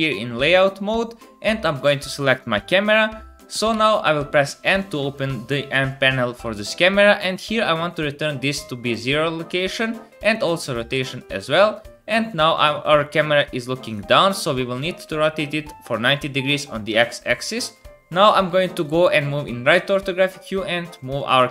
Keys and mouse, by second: 0.2-7.4 drag, 3.7 n, 7.4-9.1 middle drag, 9.1-10.3 drag, 10.3 middle click, 11.2-12.4 drag, 15.2-21.2 drag, 15.2-21.2 middle drag, 15.2-21.2 right drag, 18.8 KP_3, 19.9 g.